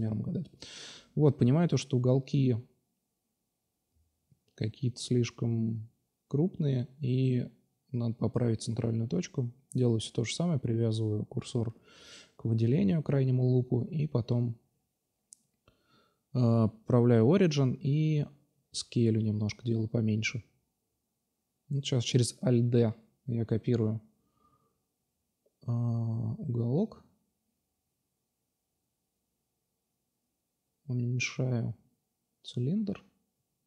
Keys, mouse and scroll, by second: 0.3 space, 2.5 BackSpace, 2.6 BackSpace, 2.7 BackSpace, 4.3 Down, 7.4 Tab, 9.6 ctrl+alt+shift+Tab, 10.9-11.5 drag, 11.9 a, 12.1 a, 12.4 s, 15.5 Tab, 16.0-16.4 middle drag, 17.5-19.0 right drag, 19.0 x, 19.3 click, 19.8-20.3 right drag, 20.3 alt+d, 21.0 click, 21.3 click, 21.5 click, 21.5 middle click, 21.7-23.2 drag, 22.0 r, 23.7-24.1 middle drag, 24.1-24.5 right drag, 24.5-25.7 drag, 24.5 s, 25.8 click, 25.8 middle click, 26.2 middle click, 26.7 middle drag, 28.3-28.6 middle drag, 28.8-29.5 drag, 30.2 s, 31.3-33.2 drag, 33.6 click.